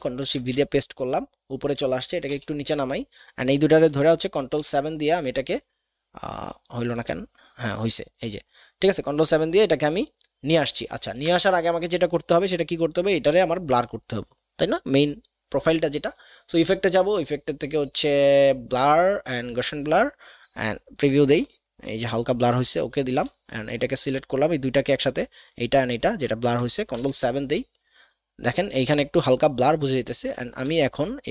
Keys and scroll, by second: 0.3 ctrl+shift+v, 2.3 ctrl+[, 2.9 ctrl+shift+[, 4.1 ctrl+shift+[, 4.5 ctrl+shift+KP_7, 11.0 ctrl+z, 26.9 ctrl+shift+KP_7.